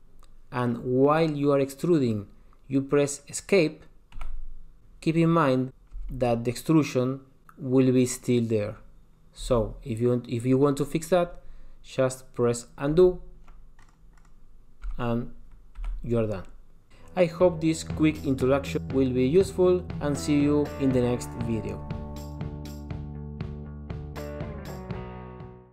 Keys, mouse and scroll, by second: 6.1 g, 13.1 super+z, 14.0 click, 14.4 click, 15.1 g.